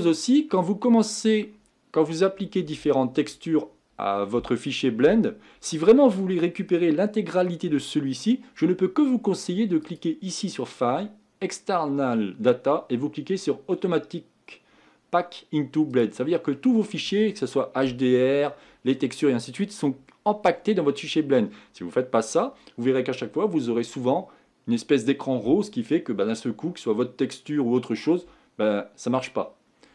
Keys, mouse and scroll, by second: 0.1 middle click, 0.9-4.5 scroll down 2, 4.5-5.8 scroll down 1, 5.8-9.5 scroll down 1, 9.5-11.2 scroll down 1, 11.2-14.5 scroll down 1, 14.5-16.5 scroll down 1, 16.5 scroll down 1, 16.6-19.7 middle drag, 19.7-20.1 scroll down 1, 20.1-29.9 middle drag.